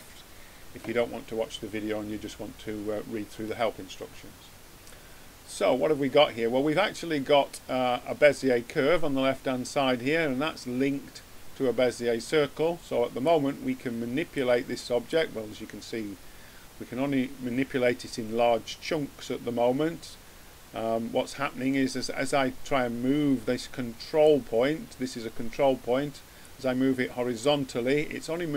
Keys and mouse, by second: 4.8-6.6 drag, 13.2-15.0 drag, 15.1-16.8 drag, 26.3-28.1 drag.